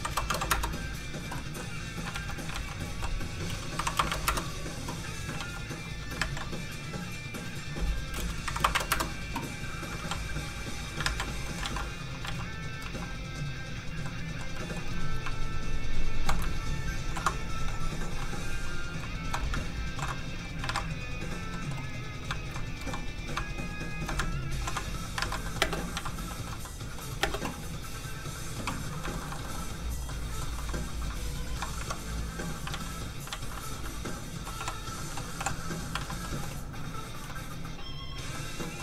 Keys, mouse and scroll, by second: 0.3 KP_5, 0.3 KP_0, 0.5 Return, 1.6 middle click, 2.0 alt+shift+middle click, 2.1 alt+shift+z, 2.5 alt+shift+z, 3.7 click, 4.1 KP_1, 4.1 KP_0, 5.2 Return, 5.4 alt+shift+z, 6.1 ctrl+alt+z, 6.2 ctrl+a, 8.0 click, 8.7 KP_1, 8.7 KP_0, 9.9 Return, 10.0 ctrl+z, 11.0 ctrl+a, 11.4 middle click, 11.5 middle click, 11.6 alt+shift+z, 12.2 alt+z, 12.3 alt+z, 12.8 alt+z, 13.4 alt+click, 13.9 scroll down 1, 14.0 middle click, 15.8 shift+click, 16.1 shift+click, 17.0 ctrl+shift+l, 17.6 l, 17.7 click, 19.1 shift+click, 19.9 ctrl+shift+l, 20.2 click, 20.7-21.5 alt+scroll down 2, 21.5 middle click, 21.9 click, 22.4 shift+click, 23.0 click, 23.5 shift+click, 24.2 ctrl+click, 24.6 ctrl+l, 24.9 click, 25.2 ctrl+alt+a, 25.4 middle click, 25.5 middle click, 25.6 space, 25.9 z, 26.3 shift+middle click, 26.5 scroll down 1, 26.6 middle click, 27.2 space, 28.0 click, 28.8 scroll up 1, 29.0 shift+middle click, 29.4 middle click, 29.5 middle click, 29.8 click, 30.1 middle click, 30.6 shift+middle click, 31.0 scroll up 1, 31.4 shift+click, 31.8 shift+Tab, 32.7 alt+z, 34.6 z, 35.4 h, 35.7 scroll up 1, 36.0 alt+a, 36.2 middle click, 37.0 click, 37.3 middle click.